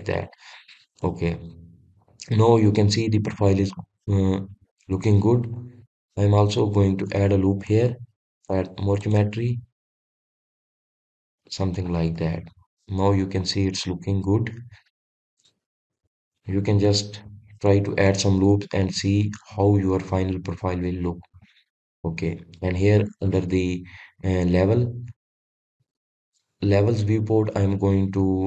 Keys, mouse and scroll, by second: 0.7 click, 1.2-1.6 scroll down 1, 1.6-4.8 middle drag, 6.5-7.2 scroll up 1, 7.2-9.1 middle drag, 9.1 ctrl+r, 12.4 click, 12.8-17.9 middle drag, 17.9 ctrl+r, 22.2 click, 25.9-28.4 drag.